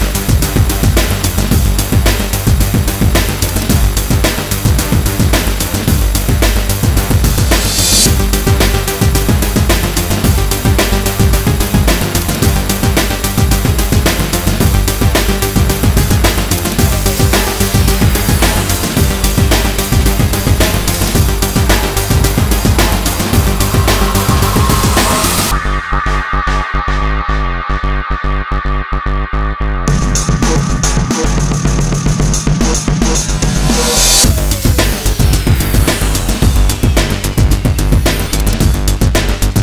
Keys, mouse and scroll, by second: 0.0 ctrl+z, 0.8 ctrl+z, 1.0 x, 1.1 ctrl+z, 1.1 click, 1.3 click, 1.5 shift+click, 1.7 click, 1.8 click, 1.9 shift+z, 2.0 click, 3.1 click, 3.2 click, 3.4 ctrl+z, 3.5 click, 3.8 shift+click, 4.1 click, 4.2 click, 4.6 ctrl+z, 5.2 click, 5.3 ctrl+z, 5.3 x, 5.3 alt+click, 5.4 click, 5.5 alt+click, 5.7 shift+click, 6.3 click, 6.4 x, 6.7 ctrl+z, 6.9 shift+click, 7.1 ctrl+z, 7.2 click, 7.3 shift+click, 7.7 alt+click, 8.1 click, 8.7 shift+click, 8.8 click, 8.9 shift+click, 9.3 click, 9.5 ctrl+z, 9.5 alt+click, 9.7 ctrl+z, 10.6 x, 10.7 ctrl+z, 10.7 alt+click, 10.7 alt+click, 11.1 click, 11.6 ctrl+z, 12.4 click, 12.6 ctrl+z, 12.6 click, 12.8 x, 12.9 click, 13.1 ctrl+z, 13.1 click, 13.3 ctrl+z, 13.4 click, 14.0 ctrl+z, 14.2 click, 14.4 alt+click, 14.6 ctrl+z, 14.7 click, 14.9 click, 15.8 ctrl+z, 15.9 alt+click, 16.0 shift+click, 16.1 click, 17.1 shift+click, 17.3 click, 17.6 click, 17.8 click, 17.9 shift+click, 18.5 ctrl+z, 18.5 click, 18.6 click, 18.8 alt+click, 18.9 shift+click, 19.0 shift+click, 19.2 click, 19.5 shift+click, 19.8 click, 19.8 ctrl+z, 20.0 alt+click, 20.3 click, 20.8 click, 21.0 shift+click, 21.3 click, 21.9 click, 23.0 click, 23.4-25.2 drag, 25.2 click, 25.9 click, 26.4 ctrl+z, 26.5 click, 26.6 ctrl+z, 27.0 click, 27.1 shift+click, 27.3 ctrl+z, 27.5 shift+click, 27.6 click, 28.6 click, 29.1 click, 29.3 click, 29.5 shift+click, 30.0-31.4 typing, 30.2 click, 30.6 click, 30.7 click, 31.2 shift+click, 31.5 click, 32.0 shift+click, 32.1 click, 32.7 click, 33.0 ctrl+z, 33.3 click, 34.0 shift+click, 34.7 alt+click, 34.8 click, 35.0 ctrl+z, 35.1 alt+click, 35.4 click, 35.5 click, 35.6 shift+click, 35.7 click, 36.2 ctrl+z, 36.3 click, 36.6 alt+click, 36.7 click, 36.9 click, 37.7 click, 38.0 alt+click, 38.1 shift+click, 38.2 click, 38.3 ctrl+z, 38.3 alt+click, 38.4 shift+click, 38.5 click, 38.7 ctrl+z, 39.3 click, 39.4 ctrl+z, 39.5 click.